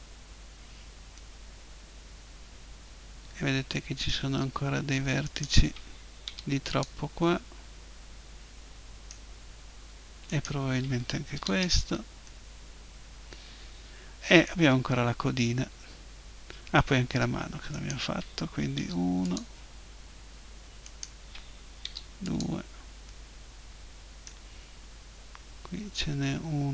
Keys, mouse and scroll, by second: 1.4-3.0 middle drag, 5.2-7.2 right drag, 6.2 Delete, 7.2-9.2 drag, 10.3-12.1 right drag, 11.4 Delete, 12.1 middle click, 17.7-19.5 right drag, 18.8 Delete, 20.8-22.6 right drag, 21.8 Delete.